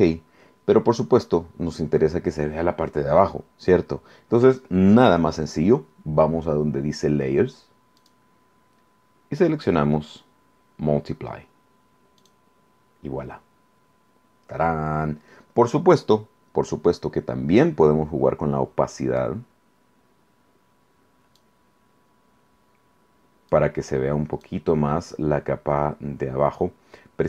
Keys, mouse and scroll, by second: 8.0 click, 12.2 click, 19.2-21.6 drag, 23.5 click.